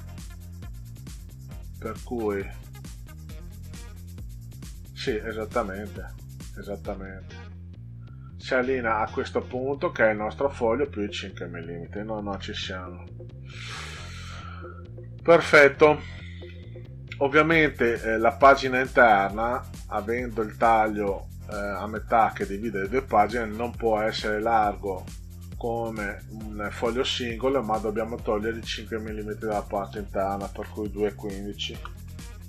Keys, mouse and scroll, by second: 0.4 click, 12.2 ctrl+z, 13.4 middle click, 14.3 ctrl+scroll down 2, 16.4 middle drag, 22.8 ctrl+scroll up 2, 25.0 middle click, 28.3-29.6 drag, 30.6 1, 31.1 5, 31.7 Return.